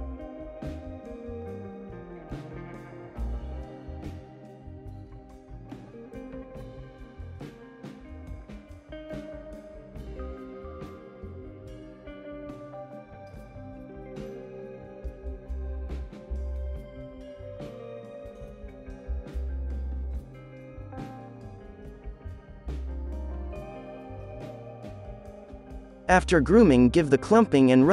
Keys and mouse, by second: 1.7 right click, 2.2 right click, 3.6-5.6 typing, 6.6 middle click, 6.8 f, 6.9 click, 7.1 ctrl+KP_3, 7.1 middle click, 7.1 right click, 7.5 f, 7.6-13.7 drag, 7.9 middle click, 7.9 right click, 9.7 middle click, 9.7 right click, 10.4 f, 10.7 middle click, 10.7 right click, 10.8 f, 11.2 f, 11.7 middle click, 11.7 right click, 12.3 f, 13.2 right click, 13.2 middle click, 13.4 KP_3, 13.5 alt+a, 13.9-15.6 drag, 14.0 ctrl+z, 14.5 middle click, 14.5-15.6 right drag, 15.6 middle click, 16.0 KP_3, 17.2 alt+a, 17.3 click, 17.7 alt+a, 17.8 z, 20.0 middle click, 20.1 Tab, 20.3 Tab, 20.5 click, 20.8 middle click, 20.9 f, 21.5 click, 21.7 ctrl+i, 22.1-26.4 drag, 22.1-24.7 typing, 23.7-25.3 middle drag, 24.3 right click, 25.9-27.1 middle drag, 26.0 alt+a, 26.1 z.